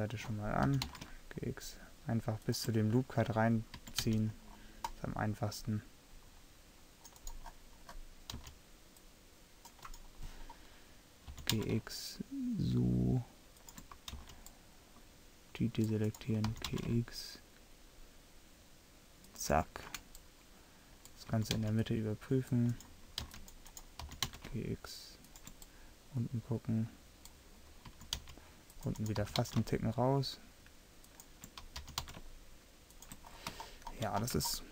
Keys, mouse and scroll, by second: 0.7 g, 3.8 a, 4.2 c, 7.3-8.4 right drag, 8.4 c, 10.6 right click, 11.4 g, 14.2 c, 16.2 right click, 16.6 g, 20.2 middle click, 21.4 a, 21.6 c, 23.3 c, 24.1 g, 28.0 a, 28.3 c, 29.3 g, 31.9 g, 33.8 click, 34.2 click.